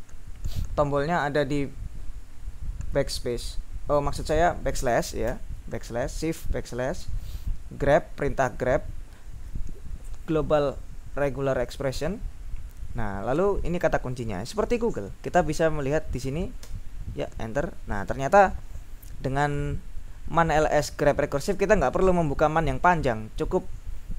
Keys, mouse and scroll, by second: 5.3 shift+\, 7.9 End, 8.5 ctrl+Left, 9.4 ctrl+Left, 13.4 End, 16.7 Return.